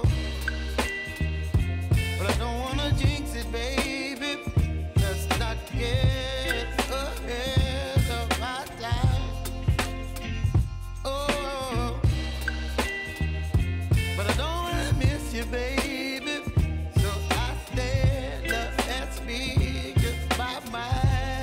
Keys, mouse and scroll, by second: 0.9 click, 8.0 Return, 8.9 j, 9.8 click, 10.2 F9, 11.2 click, 12.0 F4, 12.6 click, 13.5 space, 15.4 click, 15.9 space, 18.7 click.